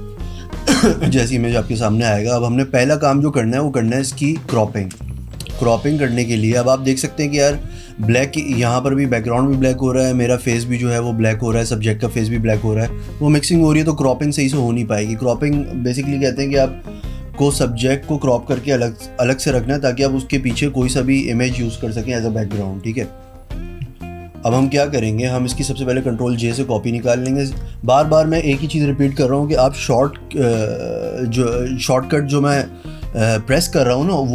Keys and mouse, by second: 26.1 ctrl+j.